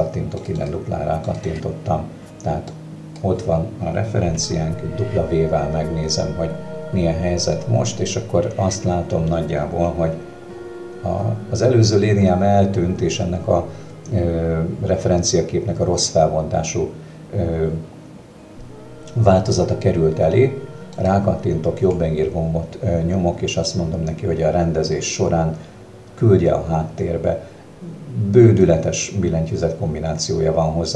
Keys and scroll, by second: 4.4 w.